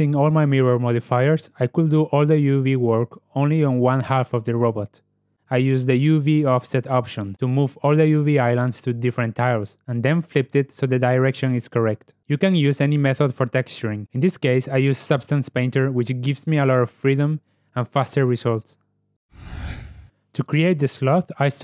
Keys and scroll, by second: 3.2 Tab, 14.3 z, 17.6 ctrl+e.